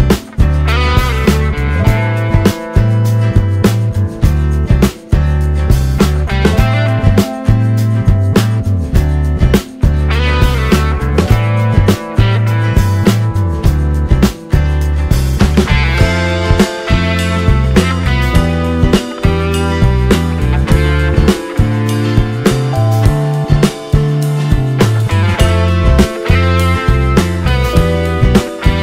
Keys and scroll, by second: 0.9-4.6 typing, 4.8 ctrl+x.